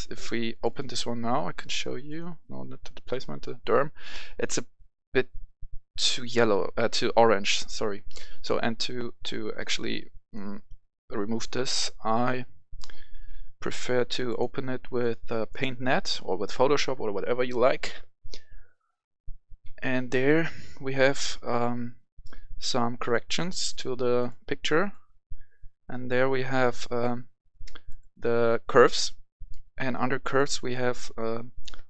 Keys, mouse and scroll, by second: 2.1-4.0 drag, 8.6 click, 10.1 right click, 14.2-31.8 drag.